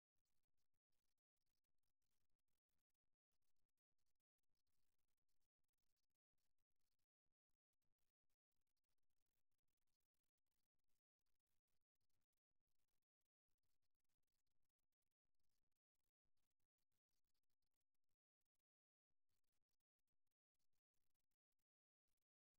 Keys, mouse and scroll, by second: 0.7-2.7 drag, 3.3-5.1 drag, 7.6-9.4 drag, 9.9-12.7 drag, 15.7 middle click, 16.7-22.5 middle drag.